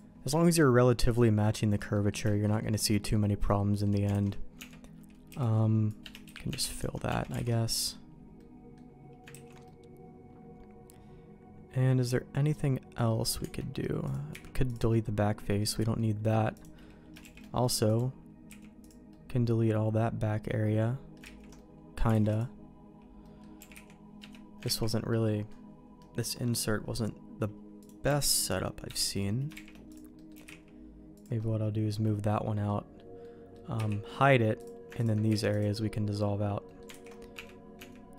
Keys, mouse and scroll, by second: 0.3 middle click, 1.0 middle click, 1.9 middle click, 2.2 shift+middle click, 2.6 middle click, 3.5 middle click, 4.1 alt+a, 4.5 Tab, 5.2 c, 6.2 f, 6.5 Tab, 7.0 Tab, 7.4 alt+a, 7.5 middle click, 8.3 middle click, 9.3 ctrl+s, 9.6-13.0 middle drag, 13.4 Tab, 14.0 click, 14.3 x, 14.9 middle click, 15.9 middle click, 16.5 click, 17.2 shift+g, 18.4 x, 19.0-21.1 middle drag, 21.4 ctrl+z, 21.5 middle click, 22.1 alt+a, 22.3 click, 23.2 middle click, 23.5 g, 24.6 ctrl+z, 25.1 middle click, 25.9 middle click, 26.5 middle click, 27.7 click, 28.0 g, 29.5 shift+g, 30.1 middle click, 30.3 g, 31.4 middle click, 32.3 middle click, 33.2 middle click, 33.7 h, 34.5 click, 35.0 click, 35.2 x, 36.6 middle click, 37.0 alt+h, 37.3 Tab, 37.7 Tab.